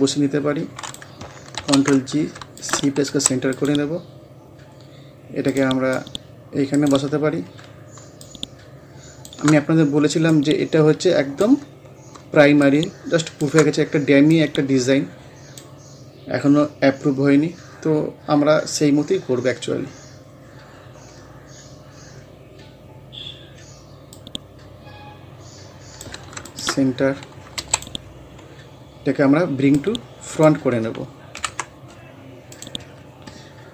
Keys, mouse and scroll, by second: 1.6 ctrl+g, 2.6 shift+click, 3.1 c, 3.6 click, 6.8 right click, 7.1 scroll up 1, 8.2 click, 8.3-16.1 shift+drag, 16.1 scroll down 1, 21.8-22.7 scroll down 1, 22.7 scroll up 1, 24.2-26.5 drag, 27.6 c, 27.8 click, 28.1 scroll down 1, 28.8 scroll up 1, 29.8-31.4 drag, 31.4 ctrl+Home, 32.6 click, 32.9 scroll down 1.